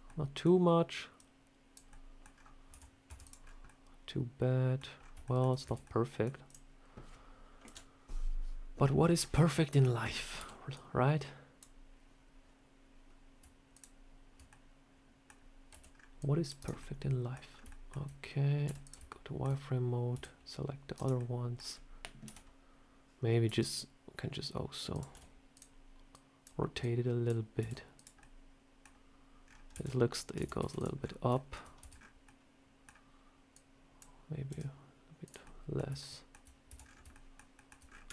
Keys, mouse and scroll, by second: 1.1 click, 1.8 middle click, 2.2 scroll down 3, 2.6 Tab, 3.0 Tab, 3.1 click, 3.3 scroll down 1, 3.5 middle click, 4.9 scroll up 3, 5.1 shift+middle click, 5.5 Tab, 5.7 middle click, 6.4 click, 7.5 KP_7, 9.1 scroll up 2, 9.3 shift+middle click, 10.3 b, 13.6 shift+click, 14.4 middle click, 15.6 c, 16.7 scroll up 1, 16.7 middle click, 17.4 scroll up 2, 17.6 shift+middle click, 18.5 z, 19.0 shift+middle click, 20.0 c, 21.1 middle click, 22.1 KP_1, 23.4 r, 25.0 z, 26.0 click, 26.7 click, 27.5 r, 28.1 middle click, 29.3 scroll down 4, 29.6 q, 30.3 Tab, 30.5 a, 30.7 click, 30.9 scroll down 2, 31.2 shift+middle click, 31.7 Tab, 31.8 scroll up 5, 32.1 middle click, 33.4 click, 34.4 r, 35.3 middle click, 35.9 shift+middle click, 36.6 Tab, 36.7 scroll down 5, 37.0 shift+middle click, 37.4 shift+middle click, 37.7 scroll up 6, 38.0 Tab.